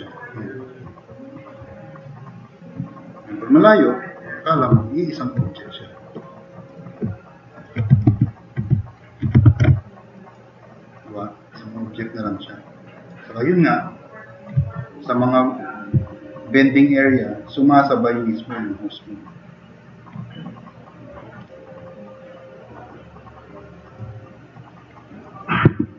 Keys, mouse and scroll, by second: 1.0 right click, 1.1 click, 1.2-1.6 middle drag, 2.1-2.5 middle drag, 3.0 middle click, 3.4-3.7 middle drag, 4.8 drag, 8.1 alt+q, 9.5 ctrl+Tab, 10.0 click, 10.4-10.8 drag, 11.0-11.6 drag, 12.3-12.7 drag, 14.1 drag, 18.5 drag, 20.7 middle click, 22.1 click, 22.8 drag, 23.3 drag, 23.7 drag, 24.1 click, 25.1-25.5 drag, 25.7 alt+q.